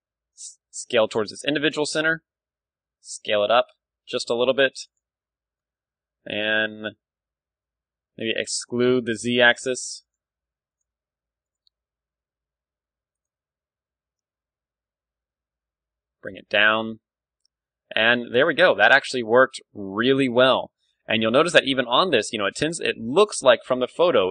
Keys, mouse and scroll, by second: 0.0-1.1 right drag, 0.3 s, 4.9-5.9 drag, 5.1 Tab, 5.9-8.1 middle drag, 6.3 Tab, 7.1 s, 10.1-12.6 drag, 10.2-12.1 typing, 11.4-12.6 right drag, 12.7 right click, 13.3 g, 14.1 click, 16.8 click, 16.9 Tab, 17.4 middle click, 18.1 click, 18.5-22.4 middle drag, 18.9 KP_1, 22.4 d.